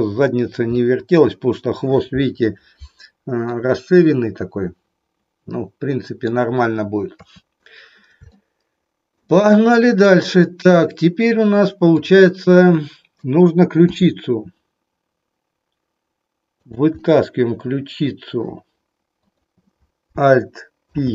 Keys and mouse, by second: 0.8 middle click, 3.4-6.3 middle drag, 7.0 KP_3, 8.4 shift+middle click, 11.9 click, 13.9 e, 17.0-18.4 middle drag, 19.2 click, 20.8 alt+p.